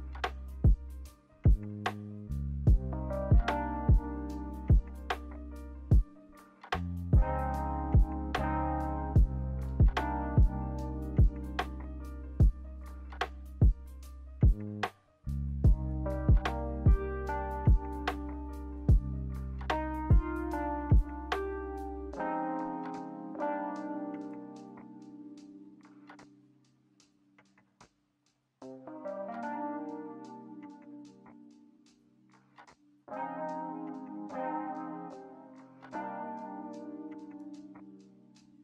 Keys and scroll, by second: 3.1-4.0 typing, 10.9-11.8 typing, 15.2-16.2 typing, 20.5-21.4 typing, 24.4-26.0 typing, 29.1-30.0 typing.